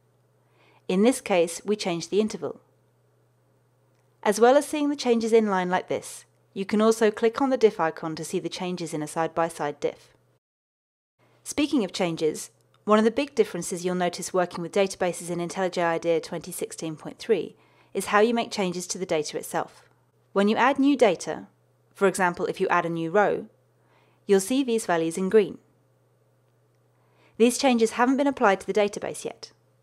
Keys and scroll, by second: 21.9 super+n, 27.7 super+n.